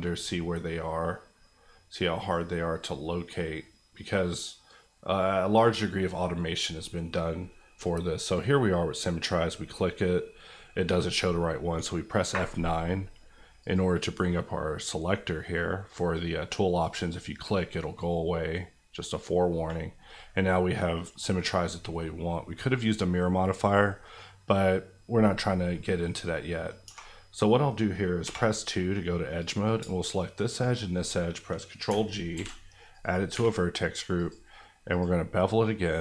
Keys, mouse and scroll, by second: 11.6 F9, 13.6 click, 19.6 middle click, 22.2-23.7 scroll up 1, 23.7 middle click, 26.8 2, 29.4 click, 32.3 ctrl+g, 32.9 click, 33.3 Tab, 34.1 click.